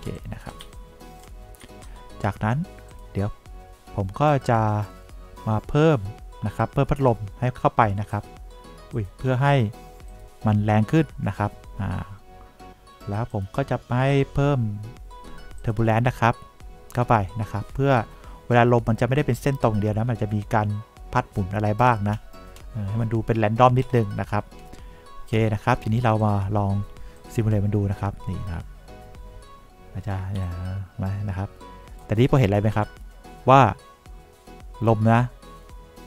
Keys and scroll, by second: 0.5 2, 1.0 3, 2.0 2, 30.7 3.